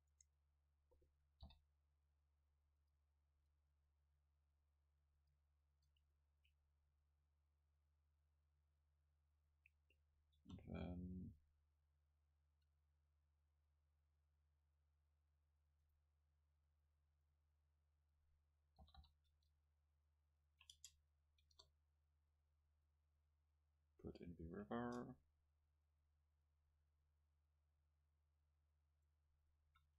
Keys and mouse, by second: 0.1 Tab, 1.5 o, 3.0 click, 3.4 a, 5.2-7.4 drag, 7.4 middle click, 7.4 e, 9.5-11.9 drag, 10.4 alt+s, 15.7-17.5 drag, 16.1 middle click, 17.5-18.6 middle drag, 18.8 g, 20.6-22.4 drag, 20.8 Tab, 21.5 KP_0, 24.7 Tab, 29.1-29.9 middle drag, 29.7 a.